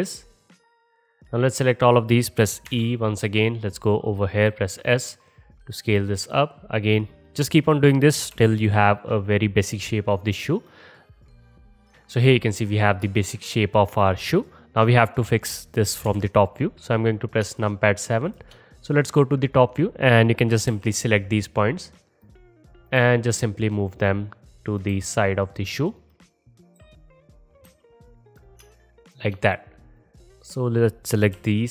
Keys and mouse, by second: 2.7 e, 4.2-6.5 middle drag, 4.5 s, 8.4 g, 10.5 click, 11.1-11.8 typing, 11.3 ctrl+z, 11.6 middle click, 11.8 middle click, 11.9 middle click, 16.1 KP_7, 17.7-19.6 alt+shift+middle drag, 19.6-22.3 drag, 20.7 g, 22.3 middle click, 22.7-24.1 drag, 23.0 g, 24.1-24.5 middle drag, 24.5-26.2 drag, 25.0 g, 26.8 f, 27.7 g, 28.7-29.5 alt+shift+middle drag, 29.5 click, 29.6 middle click, 30.0-31.7 drag, 31.4 g.